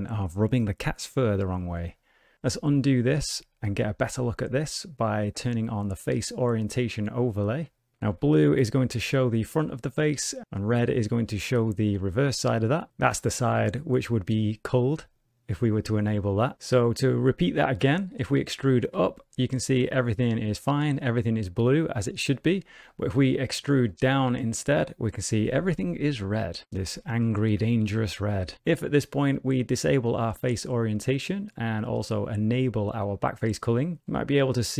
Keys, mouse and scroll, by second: 2.4 middle click, 3.0 ctrl+z, 7.9 middle click, 8.1 alt+a, 9.6 middle click, 11.8 middle click, 12.9 middle click, 14.0 click, 15.3 middle click, 17.0 click, 18.1 middle click, 18.1 middle click, 18.5 middle click, 18.9 e, 19.9 alt+a, 20.8 middle click, 22.7 ctrl+z, 22.9 middle click, 23.6 ctrl+z, 23.8 middle click, 24.2 e, 25.2 alt+a, 25.6 middle click, 27.3 shift+middle click, 27.6 middle click, 28.5 click, 30.4 click, 31.9 click.